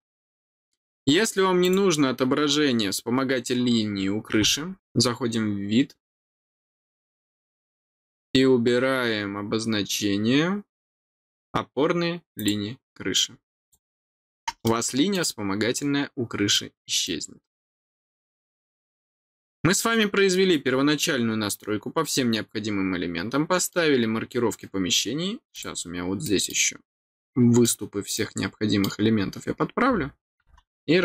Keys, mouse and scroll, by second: 0.3 scroll up 1, 1.6 click, 12.3 click, 13.5 click, 14.6 middle click, 16.5 middle click, 18.8-23.7 middle drag, 25.5 click, 26.2 middle click, 27.0 middle click, 28.1 middle click, 28.9 scroll down 1.